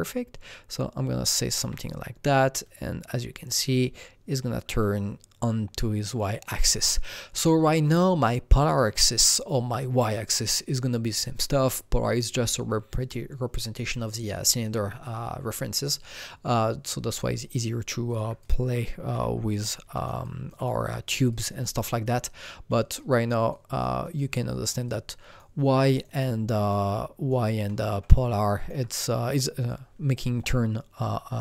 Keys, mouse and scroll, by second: 17.3 alt+Num_Lock, 17.3-19.7 alt+drag, 19.1 f, 19.7 alt+click, 20.2 alt+double click, 20.7 alt+right click, 21.0 alt+double right click, 21.3 alt+click, 21.8 alt+double click, 22.2-24.3 alt+drag, 23.5 alt+right click, 24.0 alt+double right click, 24.3-26.2 alt+middle drag, 24.8-26.7 alt+drag, 25.7 alt+right click, 26.2-28.1 alt+middle drag, 26.7-29.2 alt+right drag, 28.1-31.4 alt+drag.